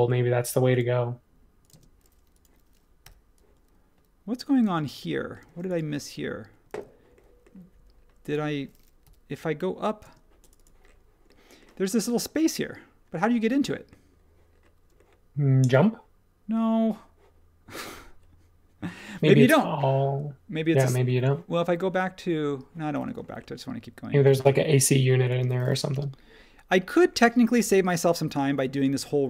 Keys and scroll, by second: 1.7 space, 3.0 p, 4.6 space, 5.4 space, 9.0 p, 10.0 space, 23.0 space, 25.9 l, 29.0 space.